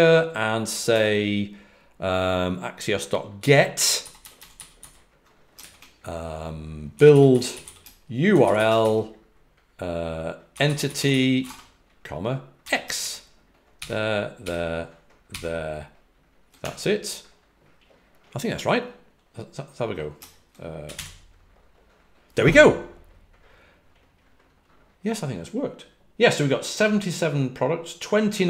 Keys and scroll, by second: 0.6 typing, 3.3 typing, 6.7-9.0 typing, 10.4-12.5 typing, 14.3-15.2 typing.